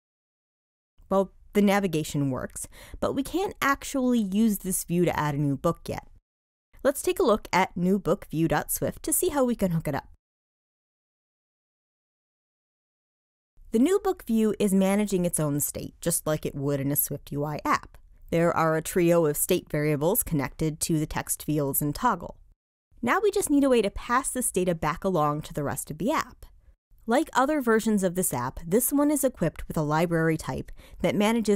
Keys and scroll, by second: 8.7 shift+super+o, 12.8 alt+super+p.